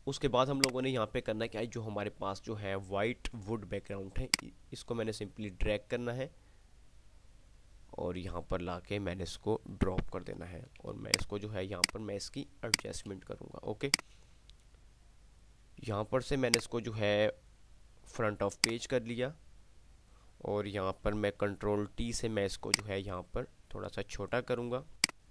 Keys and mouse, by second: 0.8 click, 4.4-8.6 drag, 11.3 alt+space, 12.1 alt+click, 12.4 alt+space, 12.9 alt+click, 14.1-15.6 drag, 21.3 ctrl+t, 22.8-24.6 alt+shift+drag, 24.6-25.3 drag.